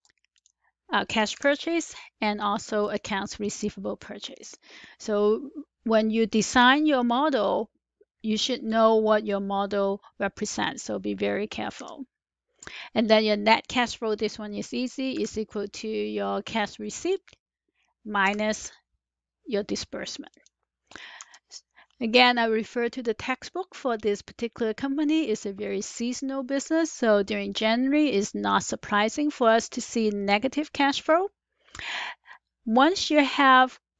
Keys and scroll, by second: 11.6 Return, 15.1 =, 18.2 -, 21.0 Return.